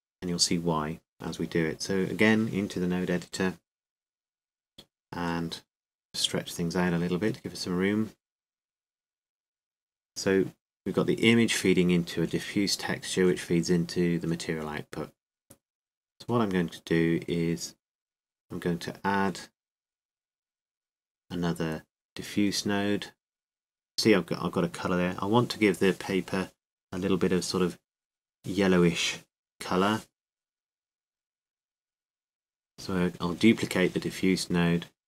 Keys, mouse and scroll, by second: 2.9-4.1 drag, 4.6-11.2 middle drag, 11.2-18.3 drag, 18.3-24.5 middle drag, 24.5-33.3 drag, 33.3 shift+d.